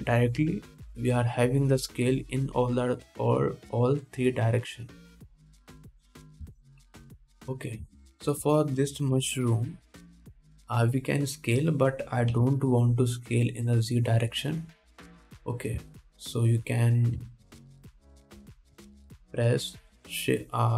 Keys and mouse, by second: 1.0 s, 8.5 x, 9.6 middle click, 9.6 right click, 10.4 KP_1, 13.6 KP_1.